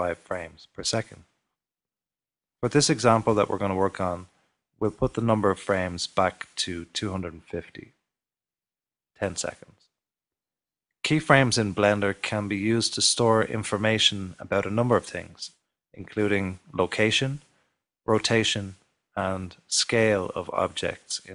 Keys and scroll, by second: 1.0-5.2 typing, 6.2-7.8 typing, 20.9-21.3 typing.